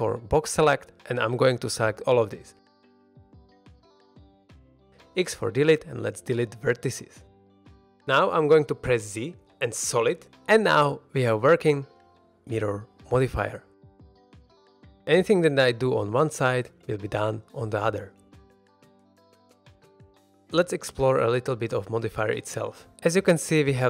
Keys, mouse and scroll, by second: 3.7-4.0 middle drag, 4.9 x, 7.5-8.0 shift+middle drag, 7.8 scroll up 1, 8.0 middle drag, 8.4 z, 10.1-10.4 middle drag, 10.6 ctrl+Tab, 11.1 scroll down 1, 11.4 shift+middle click, 11.7 ctrl+Tab, 12.3 middle click, 12.6 ctrl+Tab, 14.5 middle click, 15.1-17.0 typing, 15.4 click, 17.3 click, 17.6 click, 17.8 middle click, 18.3 middle drag, 18.6 g, 18.9 z, 19.3 click, 19.5 middle drag, 19.9 middle drag.